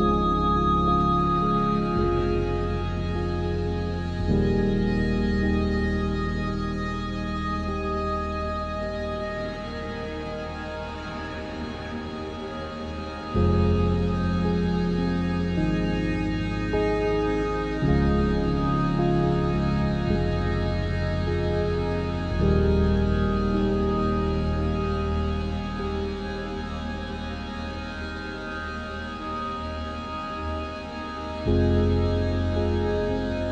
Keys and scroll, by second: 0.5 ctrl+alt+shift+e, 15.0 Escape, 16.3 Delete.